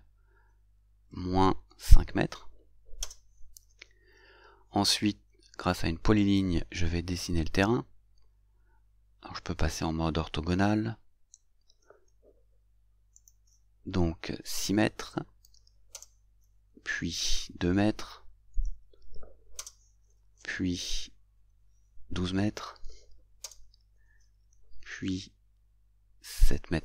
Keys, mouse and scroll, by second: 1.8 shift+5, 6.3 click, 11.3 F8, 13.3 click, 15.5 shift+6, 16.0 Return, 19.7 Return, 22.5-23.5 typing, 23.5 Return.